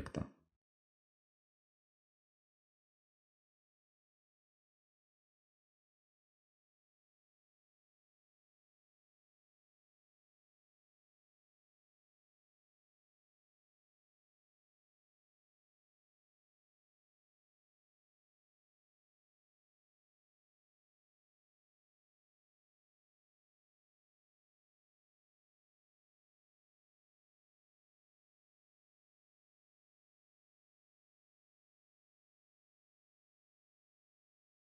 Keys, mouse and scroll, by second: 0.5 middle click, 6.7 ctrl+z, 7.6 middle click, 9.0 Tab, 10.6 click, 11.8 click, 12.3 middle click, 14.6 z, 16.1 middle click, 19.3 g, 25.7 middle click, 30.3 ctrl+z, 33.1 middle click.